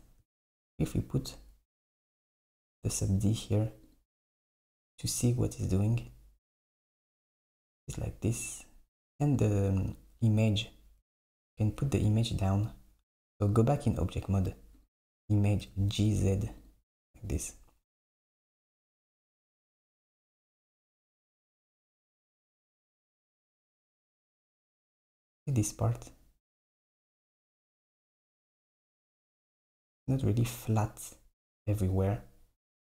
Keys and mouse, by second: 1.9-5.7 drag, 9.4 click, 12.1 Tab, 13.4 click, 14.8 click, 15.7 g, 28.0 Tab, 28.9 click, 29.4 Tab.